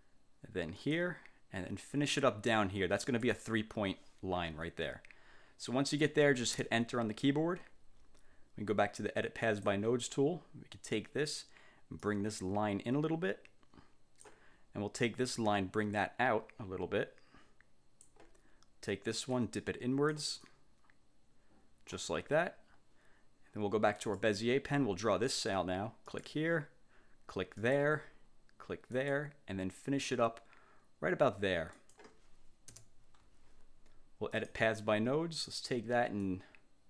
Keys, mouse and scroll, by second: 0.9 click, 3.2 click, 6.7 Return, 9.6 click, 12.1-14.6 drag, 16.1-18.4 drag, 19.5 click, 20.6-22.2 drag, 24.1 click, 26.2 click, 27.7 click, 29.1 click, 31.9 click, 32.8 Return, 34.5 click, 36.3-36.8 drag.